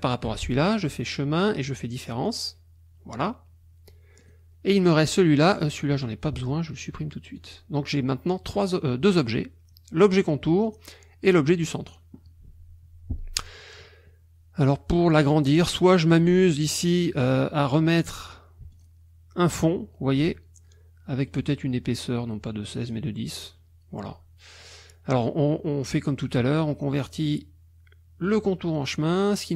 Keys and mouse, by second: 0.8 click, 2.3 click, 4.2 click, 5.4 click, 7.4 click, 9.2 click, 10.7 click, 18.7 shift+click, 21.3 right click, 22.9 click, 28.3 click.